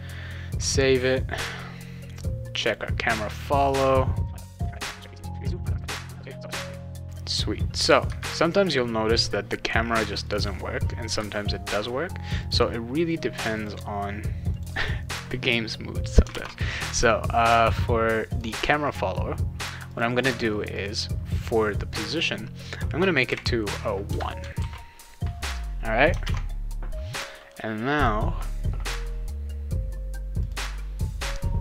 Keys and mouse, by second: 2.6 click, 4.4 ctrl+s, 5.2 click, 6.2 click, 10.3 click, 12.4 click, 13.5 click, 14.5 click, 16.3 alt+Tab, 18.3 click, 19.9 click, 20.1 click, 20.8 click, 20.9 click, 24.6 ctrl+s, 26.2 alt+Tab, 28.0 click, 30.4 click.